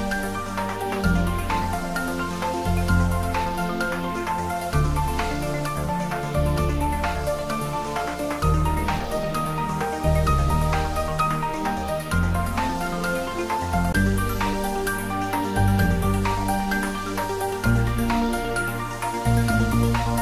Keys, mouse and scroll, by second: 0.6 a, 1.4 a, 2.4 h, 3.2 shift+a, 5.4 click, 6.3-7.0 scroll up 1, 7.0-8.4 middle drag, 8.4-10.3 drag, 10.3 Tab, 11.3 ctrl+r, 11.8 click, 13.6 g, 13.9 y, 15.6 click, 16.1 ctrl+z, 16.7 click, 17.3-18.2 typing.